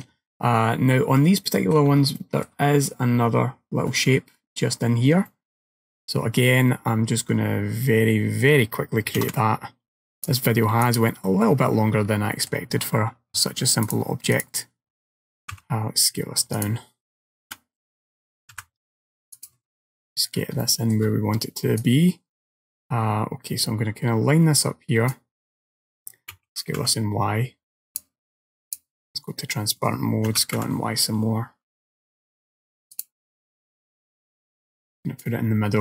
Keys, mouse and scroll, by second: 0.7-1.5 scroll down 6, 1.5 shift+middle click, 2.2 shift+middle click, 2.8-4.2 scroll up 3, 4.2 scroll up 1, 5.3 middle click, 9.3 shift+a, 11.4-12.4 scroll down 12, 12.4 middle click, 13.9 click, 15.6 s, 17.6 KP_7, 18.6 g, 19.7-20.6 scroll up 15, 20.7 shift+middle click, 21.9 click, 26.4 s, 28.7 click, 30.4 s, 34.0 click, 35.3 click.